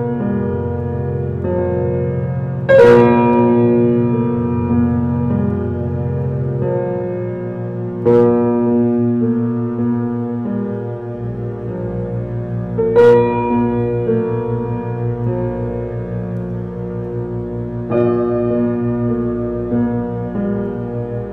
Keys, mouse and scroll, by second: 0.2-1.5 middle drag, 1.5 l, 2.7 ctrl+z, 3.7 middle click, 4.6 shift+click, 6.4 ctrl+z, 6.8-8.0 middle drag, 8.0 click, 9.3-11.1 middle drag, 11.3-12.4 middle drag, 12.4-12.7 scroll down 2, 12.7 Tab, 13.2 click, 15.7 shift+d, 17.2 alt+middle drag, 17.6 shift+middle drag, 17.9 scroll up 4, 18.2-18.6 shift+middle drag, 18.6 r, 21.2 s.